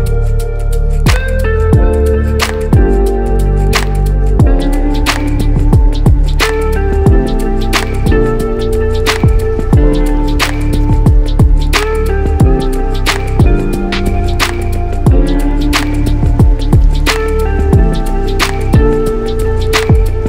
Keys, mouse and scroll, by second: 0.2-2.4 alt+middle drag, 3.0 7, 3.1 KP_7, 5.1 click, 7.0 click, 8.6 shift+click, 9.3 shift+click, 11.6 click, 12.4 shift+click, 13.0 shift+click, 13.5 shift+click, 14.2 shift+click, 14.9 shift+click, 15.5 shift+click, 16.1 shift+click, 16.8 shift+click, 17.3 shift+click, 18.0 shift+click, 19.3 shift+click, 19.9 shift+click.